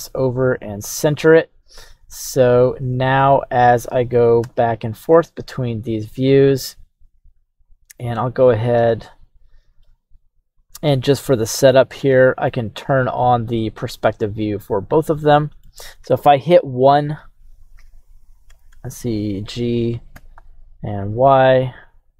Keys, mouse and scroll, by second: 0.9 click, 2.5 middle click, 3.7 middle click, 4.4 KP_1, 9.0 middle click, 9.0-9.8 scroll down 1, 10.6 right click, 10.6 click, 11.1-12.1 middle drag, 13.5 drag, 14.2-15.7 middle drag, 16.1 KP_1, 17.5 right click, 18.5 r, 18.7 g, 18.7 y, 19.3 right click, 20.2 g, 20.3 y, 20.9 right click.